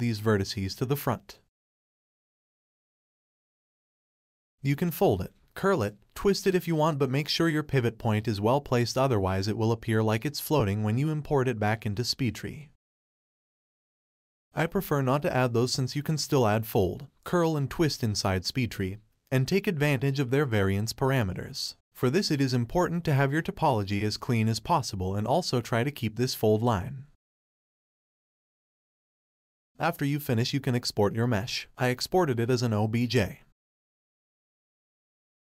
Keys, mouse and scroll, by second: 0.7 click, 1.0 middle click, 1.6-2.0 scroll up 1, 2.0 click, 2.2 click, 2.6 click, 2.9 click, 3.7-4.8 middle drag, 4.8-5.2 scroll down 1, 5.2 middle click, 5.4 1, 5.7 alt+click, 6.1 click, 6.3 scroll up 1, 6.4 g, 7.3 shift+click, 7.5 r, 8.1-8.8 middle drag, 8.9 Tab, 9.1 click, 9.4-10.1 middle drag, 10.1 shift+middle click, 10.2-10.7 scroll up 4, 10.4 shift+middle click, 10.7-11.7 middle drag, 11.7-13.8 scroll up 2, 15.7-16.3 scroll down 7, 16.3 middle click, 16.6 ctrl+z, 16.8 ctrl+z, 17.1 ctrl+z, 17.3 ctrl+z, 17.5 ctrl+z, 17.7 ctrl+z, 18.4-21.8 shift+middle drag, 21.8 Tab, 23.6 click, 24.6-28.2 middle drag, 32.1 click, 32.7-34.0 drag.